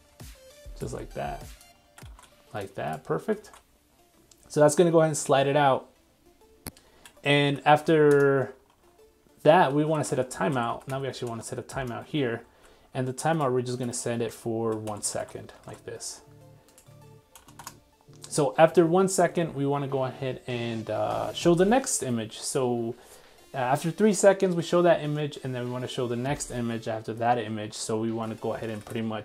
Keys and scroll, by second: 0.8 super+c, 2.1 super+s.